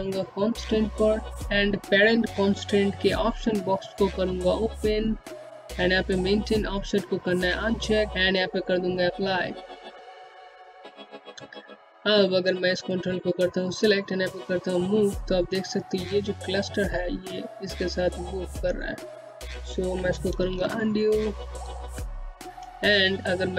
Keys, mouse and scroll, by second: 2.4 click, 8.1 click, 19.7 z, 21.0 z, 22.2 click.